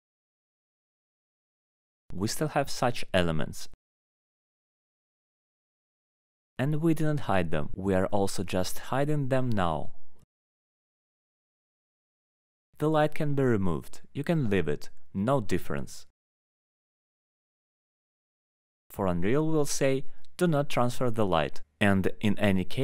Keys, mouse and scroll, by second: 0.5 scroll up 1, 0.5 alt+middle click, 0.9 click, 2.8 middle click, 3.1 right click, 4.9 click, 5.6 click, 6.0 alt+middle click, 6.7 click, 8.9 alt+middle click, 9.5 click, 10.5 alt+middle click, 10.7-11.9 scroll, 11.9-12.2 scroll down 7, 12.2 click, 12.5-13.5 scroll down 2, 15.5 click, 17.1 scroll down 1, 17.6 middle click, 18.0 middle click, 18.8 click, 19.0 middle click, 19.8 middle click, 20.2 alt+middle click, 20.3 middle click, 21.1-22.2 alt+middle click, 21.5 click, 21.7 scroll up 5.